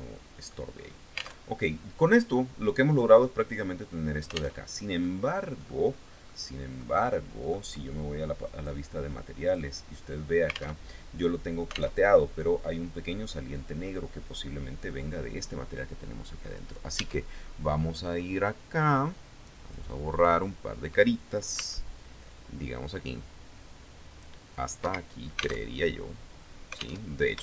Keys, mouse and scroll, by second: 0.3-0.7 scroll up 1, 1.0 alt+Tab, 4.1 alt+Tab, 4.5 click, 5.5 scroll down 2, 5.8-7.3 middle drag, 8.1 click, 9.0 click, 10.3 alt+Tab, 11.5 alt+Tab, 12.8 middle click, 16.1 right click, 16.5 Tab, 17.0 middle click, 17.7 scroll up 1, 19.2 click, 21.1 c, 21.7-24.3 drag, 24.3 Escape, 25.2 alt+Tab, 26.5 alt+Tab, 27.0-27.4 shift+middle drag.